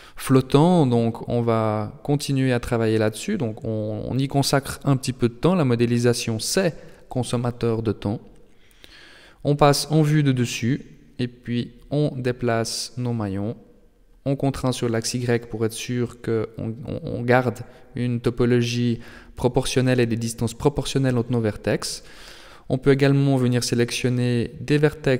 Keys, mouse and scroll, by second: 0.9 g, 6.2 middle click, 7.7 KP_7, 8.7 shift+middle click, 9.2-9.5 scroll up 2, 9.7 right click, 10.4 g, 16.5 right click, 17.3 g, 19.4 middle click, 20.4 scroll down 2, 20.8 middle click, 21.6 shift+middle click, 22.2 middle click, 23.4 right click, 24.3 g.